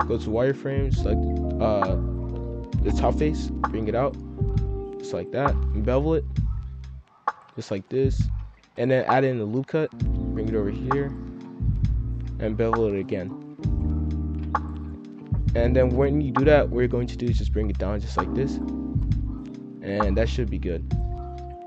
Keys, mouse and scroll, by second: 0.2 click, 0.9 s, 3.4 click, 4.5 s, 5.5 ctrl+b, 7.3-7.6 scroll up 1, 7.6-8.6 shift+middle drag, 8.6 ctrl+r, 9.3 s, 11.3 r, 12.0 ctrl+b, 13.3 scroll down 1, 13.4 middle click, 13.9 z, 14.7 middle click, 15.0-17.2 typing, 18.6 scroll up 1, 18.6 middle click, 19.3 scroll down 1, 19.3-20.8 middle drag, 20.8-21.6 drag.